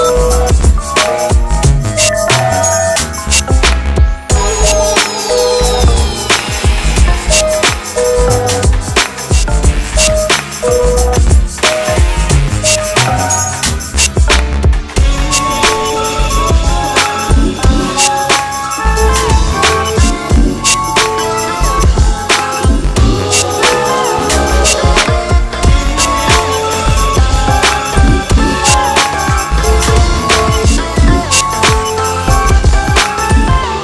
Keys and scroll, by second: 26.3 KP_Add.